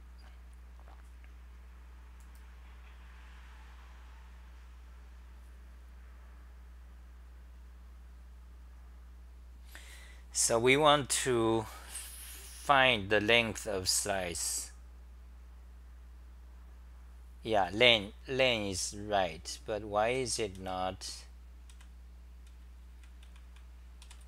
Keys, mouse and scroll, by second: 6.7 BackSpace, 19.8-24.2 typing.